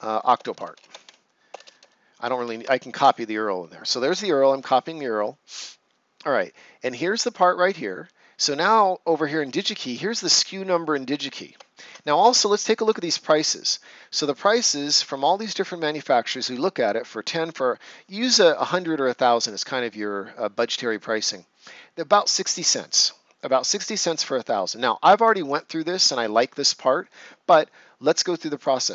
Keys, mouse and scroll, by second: 0.0-1.5 typing, 4.0 Return, 10.1 click, 11.8 ctrl+c, 12.4 ctrl+scroll up 1, 14.7-16.5 scroll up 1, 28.5 click.